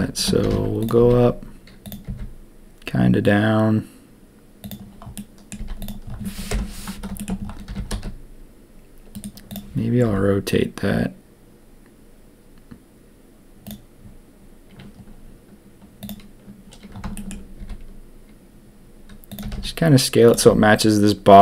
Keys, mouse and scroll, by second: 0.4 g, 1.0 s, 2.0 g, 5.1-5.5 drag, 5.5 z, 6.5 ctrl+KP_1, 7.1 shift+click, 7.6 g, 9.5 click, 10.0 r, 17.1 shift+click, 17.5 s, 19.4 g.